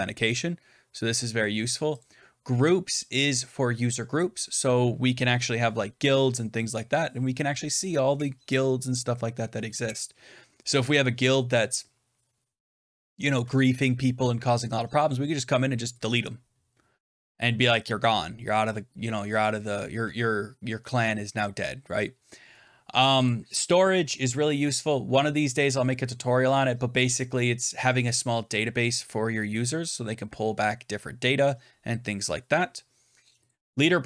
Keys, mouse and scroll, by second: 2.3-7.0 drag, 23.2-28.3 drag, 33.4 click.